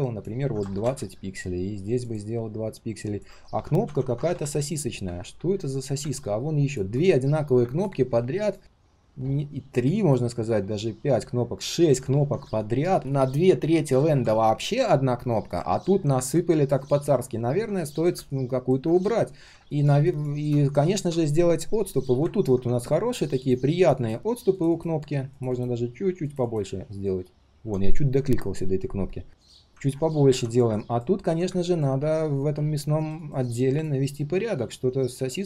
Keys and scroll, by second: 3.8 ctrl+a, 15.6 ctrl+z, 17.0 ctrl+z.